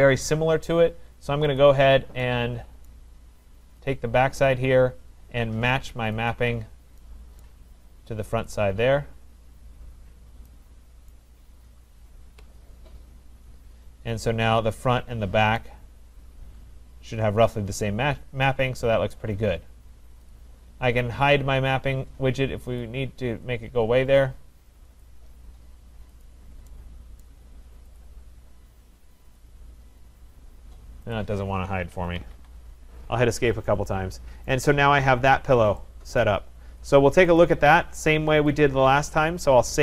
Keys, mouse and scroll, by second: 0.7-1.5 scroll down 1, 1.5 scroll down 1, 1.6 click, 1.6 scroll, 2.9 right click, 3.9 click, 6.3 click, 7.4 right click, 8.5 click, 11.1 right click, 12.3 Return, 13.6-13.9 scroll, 15.1-15.7 scroll, 19.3 right click, 20.3 click, 23.0 click, 25.4 click, 26.3 click, 27.3 right click, 28.1 click, 30.0 click, 31.2 click, 32.1 Escape, 32.2 Escape, 32.9 Escape, 32.9-33.8 scroll, 34.6 right click, 35.0-35.8 scroll, 36.3 right click, 37.4 click, 38.6 click.